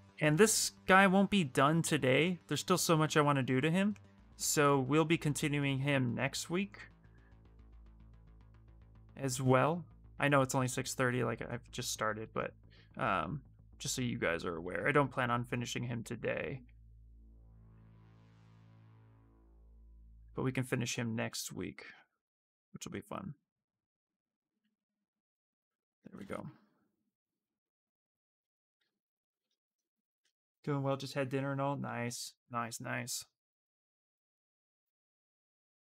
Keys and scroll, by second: 9.9 w, 24.8 q, 25.4 space, 26.0 space, 28.5 q.